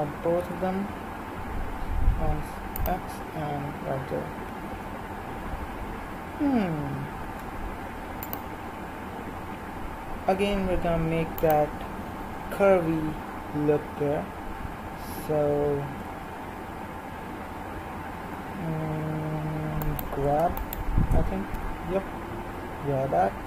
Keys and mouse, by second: 7.2 ctrl+r, 15.2-18.6 middle drag, 19.8-22.6 right drag, 21.5 g.